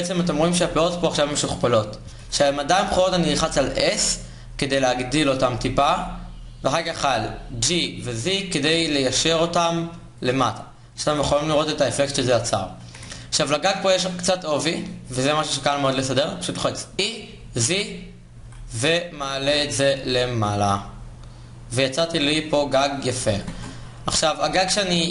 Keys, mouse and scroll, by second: 0.6-1.8 middle drag, 1.8 KP_1, 3.5 s, 7.2 g, 10.2-11.5 middle drag, 11.5 click, 12.0 middle click, 16.6 e, 19.1 click, 19.2 Tab, 21.3 middle click, 22.8 a.